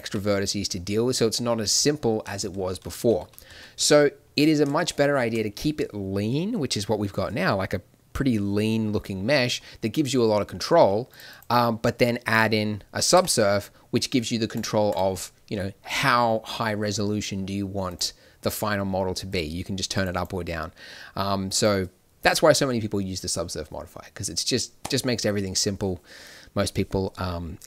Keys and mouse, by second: 2.5 ctrl+z, 2.7 ctrl+z, 2.9 ctrl+z, 3.1 ctrl+z, 3.4 ctrl+z, 3.7 ctrl+z, 13.1 Tab.